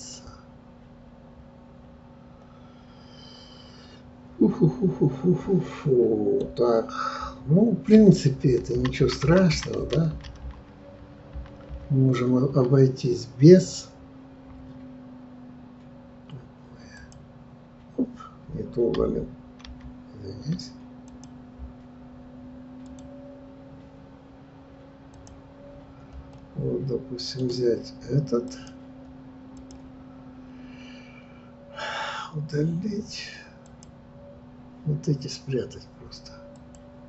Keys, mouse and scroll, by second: 0.1-3.1 middle drag, 8.2 ctrl+z, 8.6 ctrl+z, 8.7 ctrl+z, 9.0 ctrl+z, 9.5 ctrl+z, 9.8 ctrl+z, 10.1 ctrl+z, 11.4 ctrl+z, 11.7 ctrl+z, 17.0-19.8 drag, 19.8 ctrl+z, 21.0 click, 22.8 click, 25.1-26.3 drag, 26.3-28.5 middle drag, 28.5 click, 29.5 click, 36.5-37.0 drag.